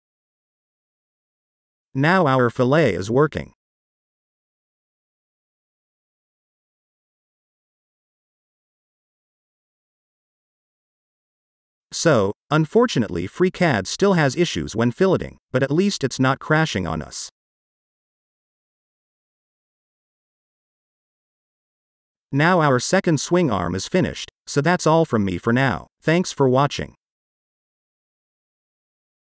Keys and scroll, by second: 1.2-2.1 typing, 20.2 typing.